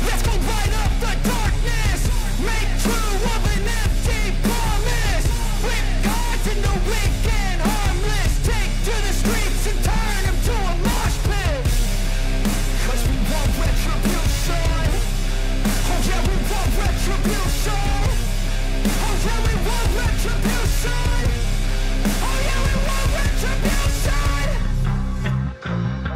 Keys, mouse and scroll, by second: 0.3 ctrl+z, 1.2-9.3 drag, 15.1 click, 17.8 Delete, 19.0 click.